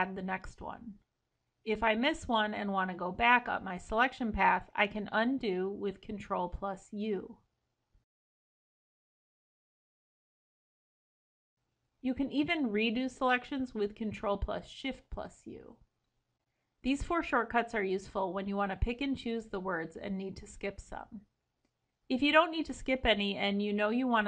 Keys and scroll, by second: 4.7 ctrl+u, 7.1 ctrl+b, 12.7 ctrl+shift+u.